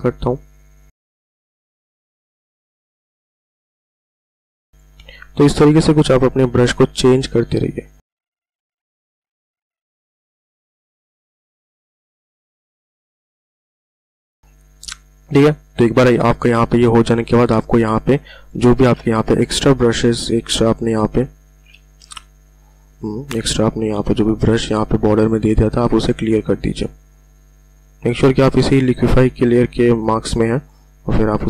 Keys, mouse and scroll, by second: 0.9 click, 1.4 [, 1.8 click, 1.9 ], 1.9 ], 2.2 ], 2.5 click, 3.0 click, 3.6 click, 4.6 click, 6.5 [, 6.7 [, 6.8-8.0 [, 8.4 click, 9.0 click, 10.3 click, 10.5 ctrl+z, 10.7-12.1 typing, 10.9 click, 11.2 click, 12.5 click, 13.0-13.8 ctrl+alt+scroll down 3, 13.4 click, 13.8 click, 15.9-16.3 ctrl+alt+scroll up 1, 17.9 space, 18.1 click, 18.3 space, 19.2 p, 22.3 typing, 24.3 typing, 26.3 click, 30.3-31.4 drag.